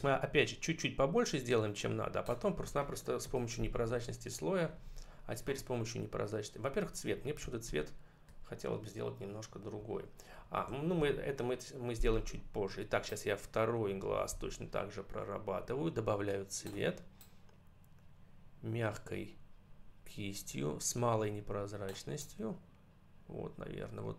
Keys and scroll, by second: 3.2 ctrl+-, 4.5 ctrl+=, 7.5 ctrl+-, 9.6 ctrl+=.